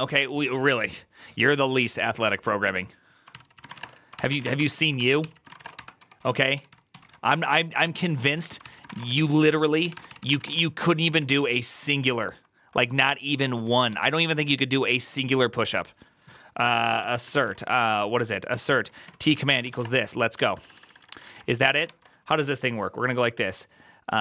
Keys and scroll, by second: 3.3-4.2 typing, 4.3 Return, 4.4 ctrl+d, 4.8 ctrl+d, 5.1 ctrl+c, 5.2 ctrl+c, 5.3-7.4 typing, 7.7 ctrl+c, 7.9 ctrl+u, 8.0 ctrl+u, 8.5-11.6 typing, 13.3-14.3 typing, 17.3-21.9 typing.